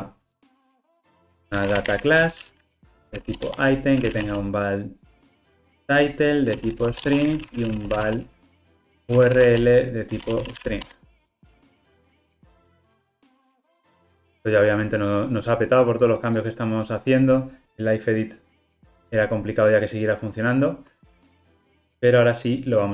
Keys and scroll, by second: 2.3 Return, 10.9 Escape.